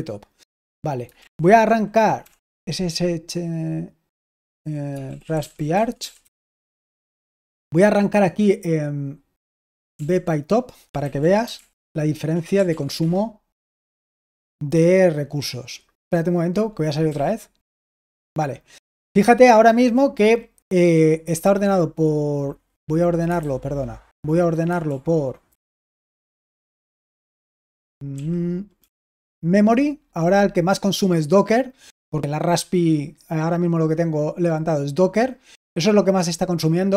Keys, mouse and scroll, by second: 1.1 super+l, 1.9-2.9 typing, 4.7-6.7 typing, 9.8-13.1 typing, 16.9 typing, 23.3 super+h, 24.7 super+l, 25.4 super+h, 26.1 Right, 26.5 Right, 27.0 Right, 27.5 Right, 28.0 Right.